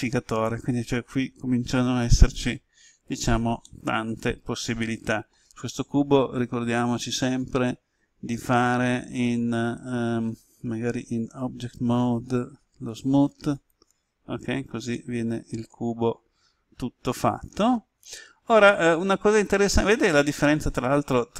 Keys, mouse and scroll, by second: 3.6-6.2 middle drag, 11.2 Tab, 13.6 click, 14.9-21.3 middle drag.